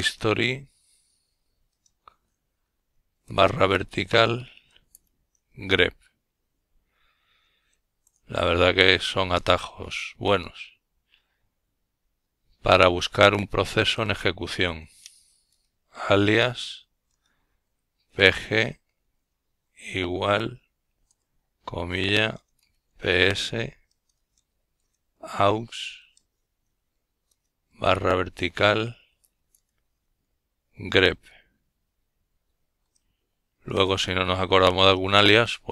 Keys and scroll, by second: 3.9 typing, 7.3-8.8 typing, 9.8-10.4 typing, 12.4 typing, 13.8-18.0 typing, 20.0 typing, 21.4-23.1 typing, 25.3-26.0 typing, 31.3 Return.